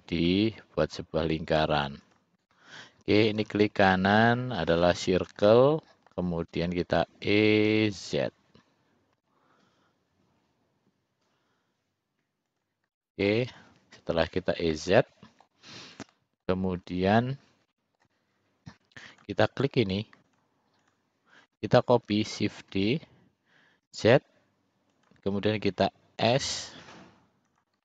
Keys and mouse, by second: 1.7 c, 3.3-5.0 right drag, 5.6 middle click, 7.1 e, 13.0 middle click, 13.6 click, 14.8 middle click, 16.2 middle click, 17.8 middle click, 19.2 click, 20.4 shift+click, 20.9 shift+click, 22.8 shift+d, 26.3 s.